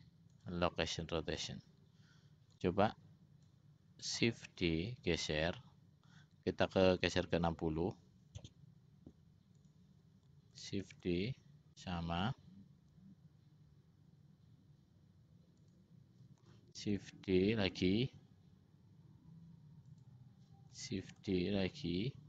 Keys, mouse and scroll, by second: 2.8 click, 4.9 shift+d, 11.2 shift+d, 17.1 shift+d, 21.4 shift+d.